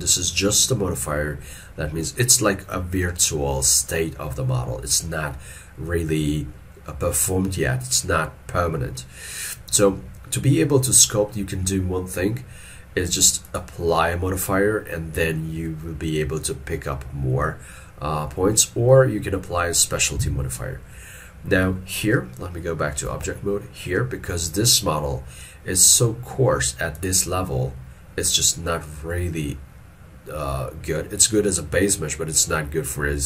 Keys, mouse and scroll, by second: 23.1 ctrl+Tab.